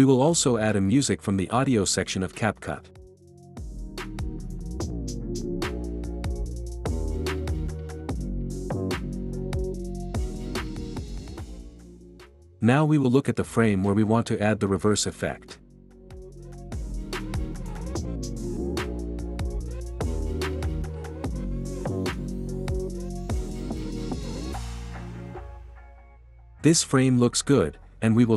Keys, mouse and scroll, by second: 0.2-1.4 drag, 1.8-2.9 drag, 5.2-6.6 drag, 7.5-8.5 drag, 9.2 click, 9.9 space, 10.0 click, 12.3 click, 17.9 click, 26.9 ctrl+b, 28.0 click.